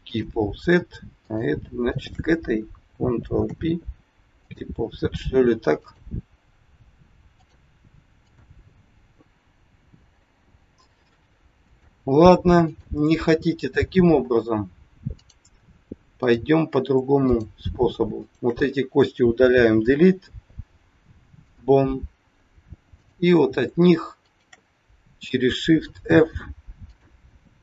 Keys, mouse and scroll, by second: 1.1 click, 1.9 shift+click, 3.4 ctrl+p, 5.7 click, 8.1 click, 9.7 g, 12.6 click, 16.2 click, 17.2 shift+click, 18.2 click, 19.4 Delete, 23.0 click, 24.2 shift+click, 26.0 f, 26.9 click.